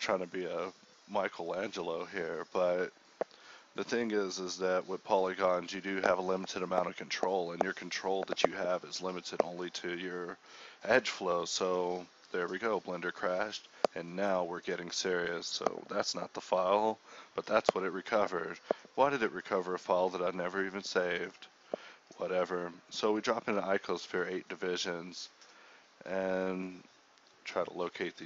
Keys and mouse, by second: 0.1 right click, 0.2 x, 0.5 right click, 1.5-3.4 typing, 1.8 Tab, 5.5 KP_1, 6.0 Tab, 7.0 click, 7.2 g, 7.5 click, 7.9 Tab.